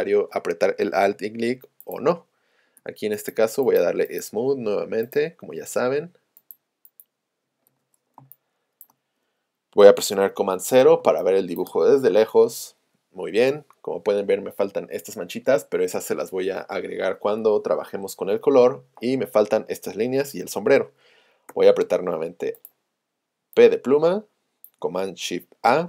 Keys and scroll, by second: 1.9 v, 2.8 s, 21.5 p.